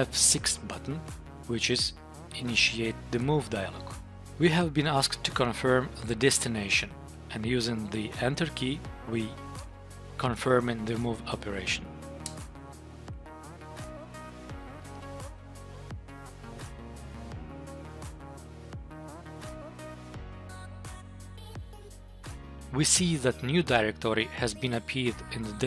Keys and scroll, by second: 3.1 F6, 12.2 Return, 22.4 Tab.